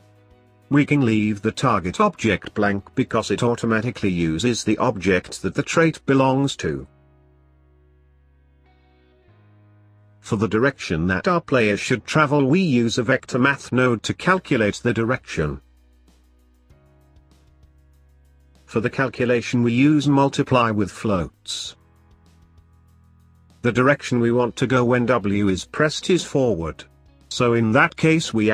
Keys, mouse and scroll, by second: 0.8-3.8 drag, 3.9-5.2 drag, 5.2 middle click, 6.0 scroll up 1, 7.4 shift+a, 12.6 click, 14.0-19.6 middle drag, 19.6-24.5 drag, 24.5 shift+a.